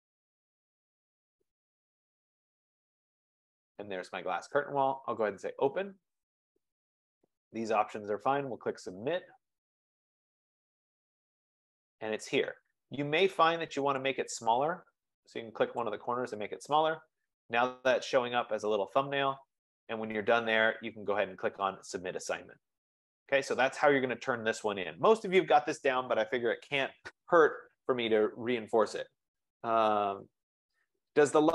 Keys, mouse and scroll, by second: 0.0 click, 0.8 click, 1.0 click, 2.6 click, 2.8 click, 3.8 click, 5.5 click, 8.6 click, 11.3 click, 15.8 click, 20.2-20.8 scroll down 3.